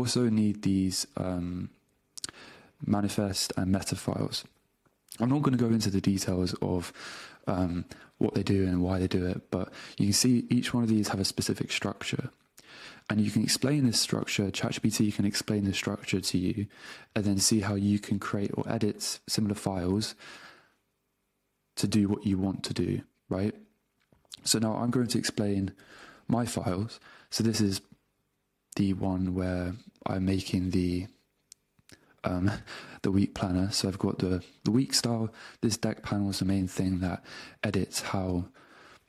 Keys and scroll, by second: 11.0 Down, 13.3 Up, 19.3 Down, 25.1 super+Tab.